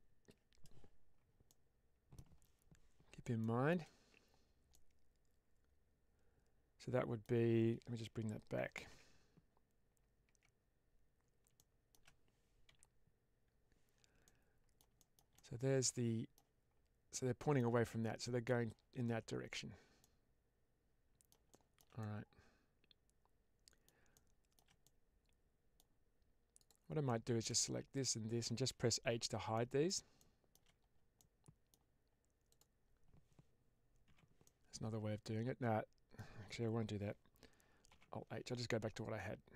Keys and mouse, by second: 1.4-2.0 middle drag, 3.3-3.6 shift+middle drag, 4.6-7.1 middle drag, 8.8 Tab, 10.1 Tab, 11.5-11.8 middle drag, 14.1 middle click, 14.9 shift+middle drag, 15.3-16.2 middle drag, 17.0 middle click, 17.8 middle click, 19.9-21.2 middle drag, 21.4-21.7 shift+middle drag, 21.9-23.7 middle drag, 24.0 shift+drag, 24.2-24.6 shift+middle drag, 24.7-25.7 middle drag, 27.0 shift+middle drag, 27.8 shift+click, 29.0 h, 29.4-29.9 middle drag, 30.1-30.4 middle drag, 31.1-31.6 middle drag, 32.4 click, 34.0 h, 34.3-36.0 middle drag, 37.8 alt+h.